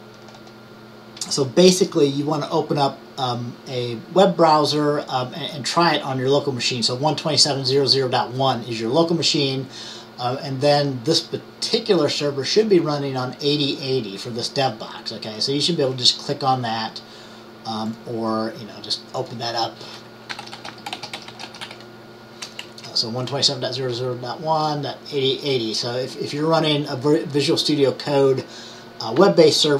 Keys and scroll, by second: 20.2-22.2 typing, 22.7 shift+Right.